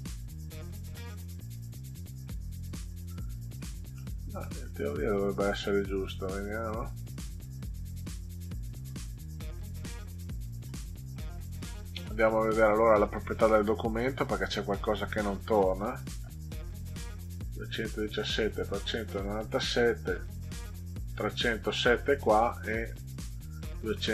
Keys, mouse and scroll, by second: 3.6 middle click, 4.4 middle click, 6.0 click, 9.7 ctrl+z, 13.9 click, 15.1 click.